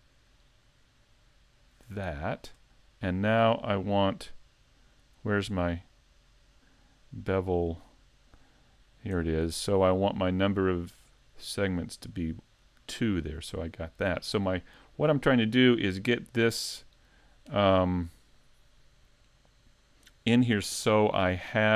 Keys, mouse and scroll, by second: 2.3 shift+click, 5.2 click, 7.0 click, 8.2 click, 11.8 click.